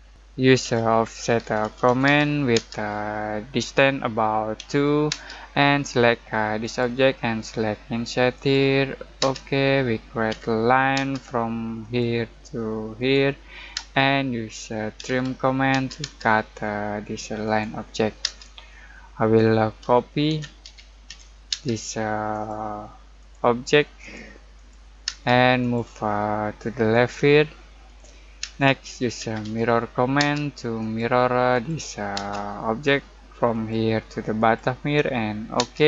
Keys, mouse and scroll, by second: 0.1 Escape, 0.6-2.5 typing, 4.5 2, 5.1 space, 6.6 click, 9.2 space, 10.3 l, 10.9 space, 11.8 click, 13.7-15.7 typing, 17.4 click, 18.2 space, 18.7-19.2 scroll down 1, 19.2 middle click, 19.8-21.5 typing, 20.3 Escape, 22.3 click, 25.0 space, 25.6 click, 26.1 middle click, 27.8 click, 28.4-30.1 typing, 30.8 click, 32.1 space, 33.5 click.